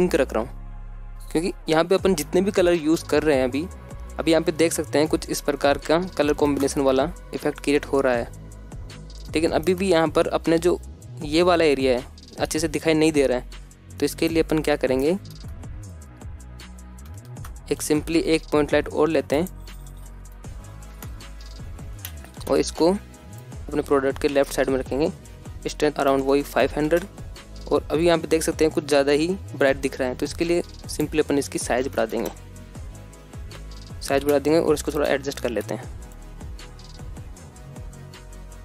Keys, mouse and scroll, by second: 8.5 alt+shift+z, 11.4-11.8 shift+middle drag, 12.0-13.0 scroll up 1, 13.0-14.2 scroll up 1, 14.2 scroll up 2, 16.0-17.2 scroll down 5, 16.3 middle click, 16.9 shift+middle drag, 17.3-17.7 scroll up 4, 18.3 alt+shift+z, 18.6 shift+a, 20.4 KP_0, 21.0 g, 21.3 z, 21.9 click, 22.5 g, 22.7 x, 23.5 click, 25.6-28.0 drag, 26.3 KP_0, 30.8-33.2 drag, 33.9 z, 34.2 click, 34.2 x, 34.2 g, 34.3 x, 35.0 click, 35.0 middle click, 35.2 middle click, 35.2 scroll down 2, 35.5 g, 36.0 click, 36.4 h, 36.7 ctrl+z, 36.9 g, 37.1 click, 37.2 KP_0, 38.1 scroll up 1.